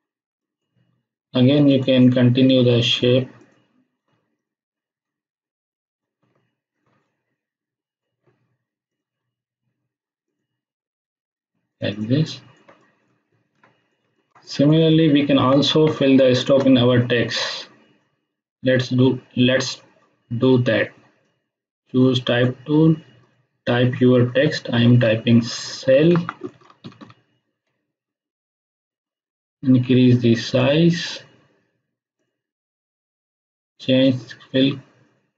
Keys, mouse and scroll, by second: 4.3 shift+click, 7.1-8.2 scroll up 1, 8.8 shift+click, 10.2 shift+click, 12.0 space, 12.2 ctrl+click, 13.5-14.7 ctrl+click, 14.8-15.5 ctrl+click, 21.2-22.4 drag, 26.1-27.4 typing, 28.3 click, 30.9-35.3 drag.